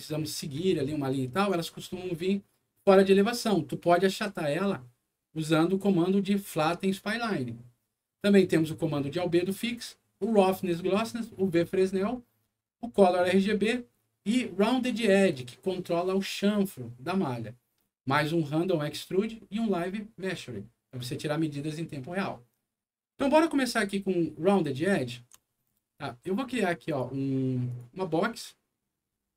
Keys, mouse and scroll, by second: 0.7 alt+middle click, 3.6 alt+middle click, 24.9 alt+middle click, 25.4 alt+middle click, 25.8 alt+scroll down 2, 26.8 alt+click, 27.7 alt+click, 28.3-29.3 drag.